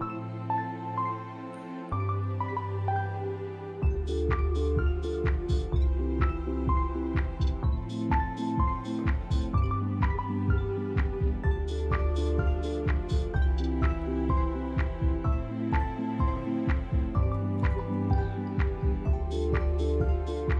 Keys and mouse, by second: 0.1 click, 1.7-4.8 drag, 5.3 g, 12.7 shift+middle click, 14.4 shift+d, 16.6 middle click, 20.1 g.